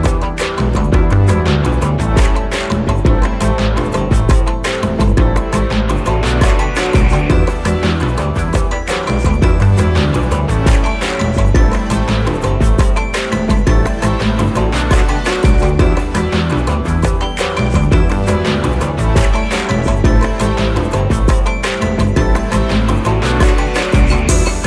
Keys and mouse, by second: 3.8 click, 7.4 click, 11.0-15.9 drag, 19.5 right click, 21.7 click.